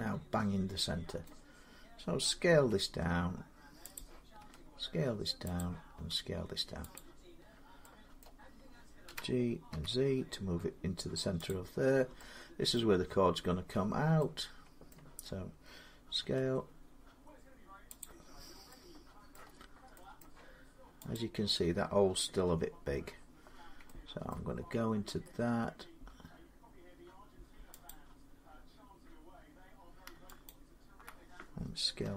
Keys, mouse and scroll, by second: 1.0-2.5 middle drag, 2.4 s, 3.8 click, 4.2 s, 5.4 click, 5.8 s, 6.8 click, 7.2-7.8 scroll, 8.0 middle click, 8.9-9.5 typing, 11.3 click, 11.3-11.8 scroll up 5, 12.6 middle click, 12.9 scroll down 3, 13.1 scroll up 1, 14.0 scroll up 1, 14.7 middle click, 16.0 s, 17.2 scroll, 17.8 click, 18.3 scroll, 19.1 middle click, 19.3-19.7 scroll, 20.0 middle click, 22.3 Tab, 22.3 click, 22.9 scroll, 24.1 shift+middle click, 24.4-24.8 scroll, 27.4 shift+middle click, 27.7 click, 30.3 alt+click, 31.8 s.